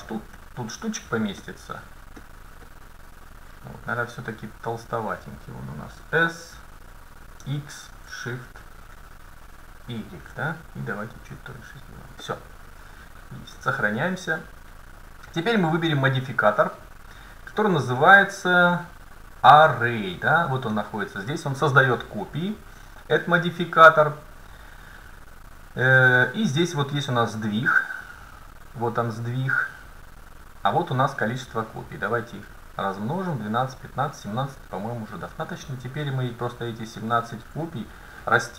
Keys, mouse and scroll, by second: 1.6-2.2 scroll up 1, 2.2-5.1 middle drag, 6.2 s, 13.6 ctrl+s, 16.9-20.0 drag, 28.1-29.9 drag, 31.1-36.4 drag.